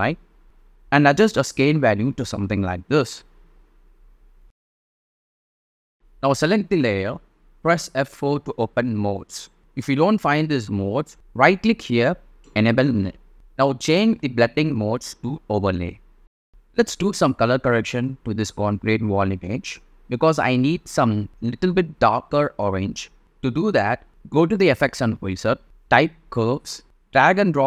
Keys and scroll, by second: 24.7-26.2 typing.